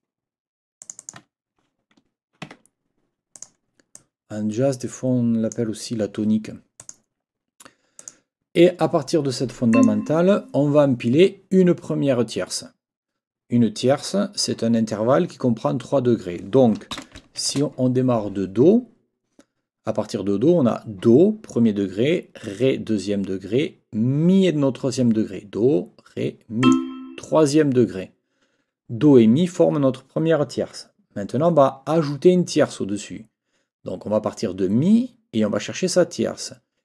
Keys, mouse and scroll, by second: 0.8 click, 2.5 Escape, 3.3 click, 5.6 click, 6.8 click, 8.0 click, 9.7 click, 16.9 n, 17.4 shift+-, 26.6 click.